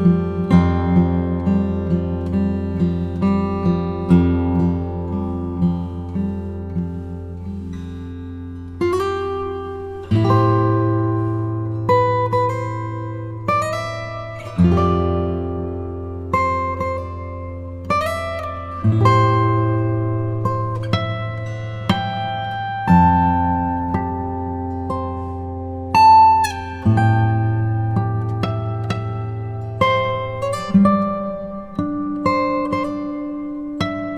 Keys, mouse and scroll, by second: 0.4 shift+d, 6.5 click, 6.9-10.0 middle drag, 10.7 shift+a, 15.4-22.3 drag, 25.1-26.2 drag, 28.6 click, 30.8 click, 32.2 g.